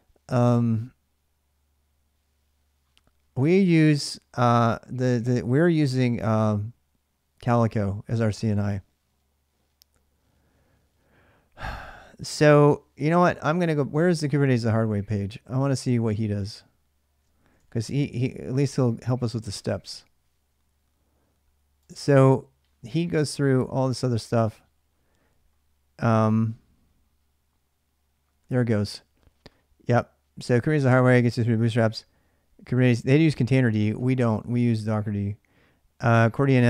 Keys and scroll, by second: 17.2-18.2 typing.